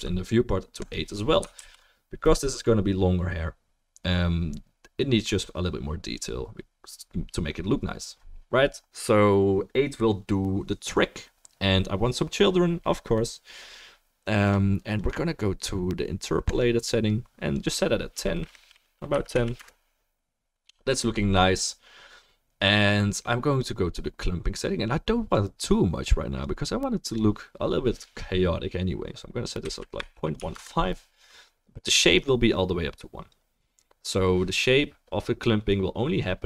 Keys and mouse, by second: 2.0 ctrl+s, 14.5-16.8 drag, 16.8 right click, 17.7-27.0 drag.